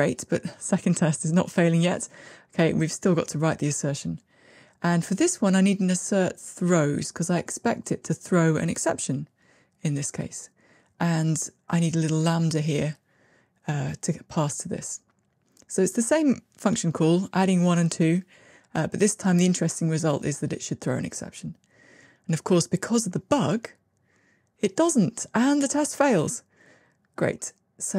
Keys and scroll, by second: 6.2 Tab, 13.4 Tab, 14.3 Escape, 15.7 Tab, 21.1 ctrl+r.